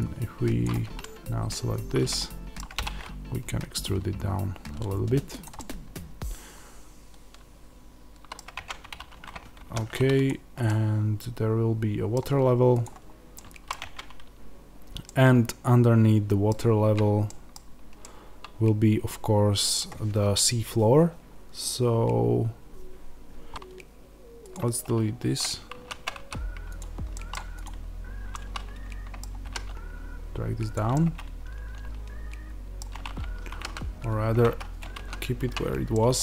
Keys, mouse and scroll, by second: 0.5 click, 0.9-2.7 middle drag, 2.7 e, 5.3 click, 5.5 middle click, 8.4 Tab, 9.5 alt+h, 10.1 click, 10.6 middle click, 12.7 click, 13.2 middle click, 13.7 Tab, 14.9 middle click, 23.5 Tab, 24.4 x, 25.6 ctrl+z, 26.7 x, 27.0 middle click, 27.5 click, 28.2 middle click, 29.3 g, 30.6 click, 30.8 middle click, 33.4 g, 34.4 Escape, 34.8 ctrl+z, 35.8 middle click.